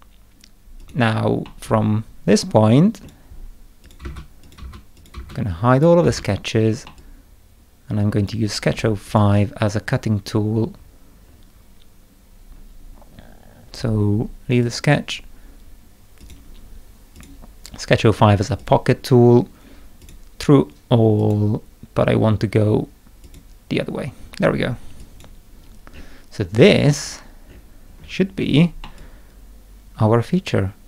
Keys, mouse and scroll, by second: 0.8 click, 1.4-3.0 middle drag, 1.6-3.1 drag, 3.8 click, 4.0 space, 4.4 click, 4.6 space, 5.0 click, 5.2 space, 5.7 click, 6.0 space, 6.9-8.2 middle drag, 7.0-8.3 drag, 9.0 click, 10.8 scroll up 1, 11.3 scroll down 1, 14.6 click, 16.2 click, 17.1 click, 18.6 click, 20.0 click, 21.2 click, 23.2 click, 25.0 click, 25.9 scroll down 2, 26.5-26.9 scroll down 1, 27.0-28.3 scroll down 4, 28.8-30.8 middle drag, 29.0-30.8 drag.